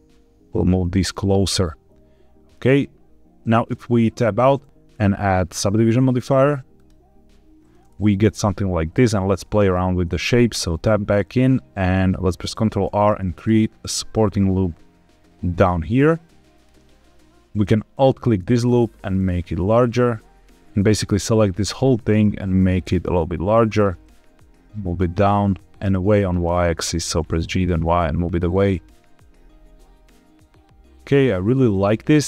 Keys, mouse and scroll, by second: 0.7 click, 1.0-2.4 middle drag, 3.6 Tab, 4.8-6.8 drag, 8.0-8.8 middle drag, 9.5 middle click, 10.4 Tab, 12.4 ctrl+r, 16.4 click, 17.8 alt+click, 18.5 middle click, 19.1 s, 20.6 ctrl+z, 20.8 click, 21.8 middle click, 22.3 s, 23.6 click, 23.8 g, 23.9 z, 24.9 click, 25.4 g, 25.9 y, 26.9 h, 28.2 click, 28.5-31.1 middle drag, 31.2 Tab.